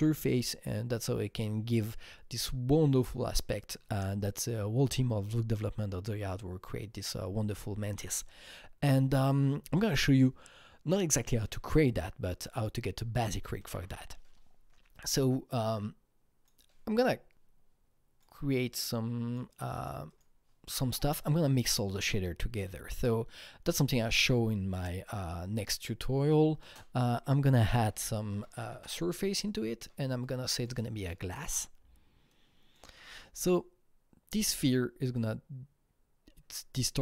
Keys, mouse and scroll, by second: 8.1 Right, 13.5 Tab, 13.7 Right, 14.9 click, 15.6-27.5 drag, 26.6 ctrl+space, 27.3-28.7 typing, 28.7 Return, 28.7 Down, 29.5 click, 30.2-32.3 drag, 32.6 Return, 32.6-36.1 drag.